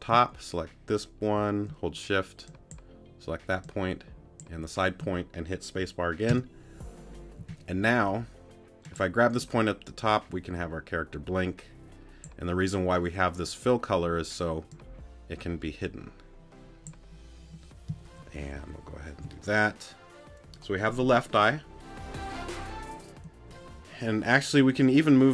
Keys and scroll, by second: 6.3 space.